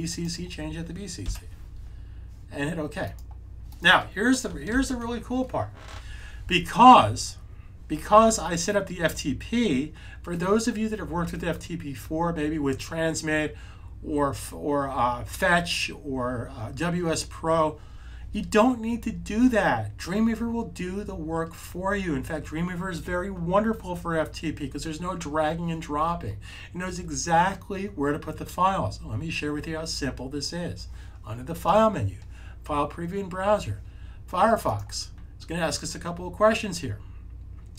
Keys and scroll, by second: 1.1 b, 4.6 super+s.